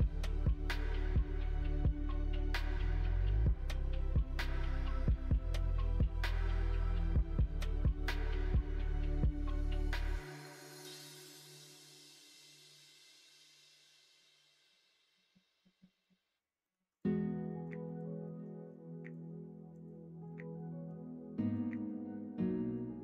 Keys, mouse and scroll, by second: 0.7 3, 1.4 click, 2.7 ctrl+click, 3.2-4.2 middle drag, 5.2 click, 6.8 3, 7.4 click, 8.2 alt+z, 10.0-11.4 drag, 11.5 scroll up 1, 11.6 middle click, 12.2 scroll down 1, 13.2 click, 13.7 scroll up 1, 13.7 middle click, 14.5 middle click, 15.0-15.6 scroll up 2, 15.1 middle click, 15.6 middle click, 15.9 middle click, 16.0 scroll down 1, 16.6 scroll up 1, 16.9 click, 17.4 middle click, 17.8 middle click, 18.2 middle click, 19.7 click, 20.2 middle click, 21.4 shift+click.